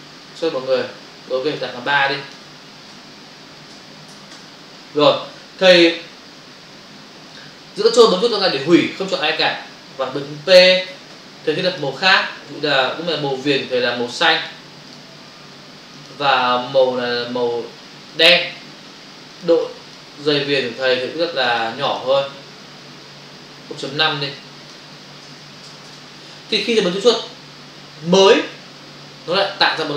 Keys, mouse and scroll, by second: 2.0 click, 2.9 2, 3.7 BackSpace, 4.1 3, 4.3 Return, 8.1 ctrl+click, 11.7 click, 14.3 click, 14.9 double click, 15.9 click, 18.1 click, 19.7 click, 21.5 click, 21.6 double click, 21.9 click, 22.7 click, 24.3 click, 25.2 0, 28.1 click.